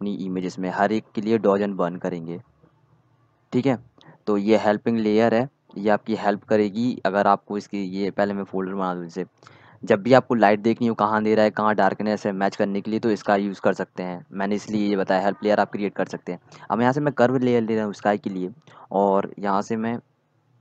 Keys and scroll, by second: 9.0-10.5 typing.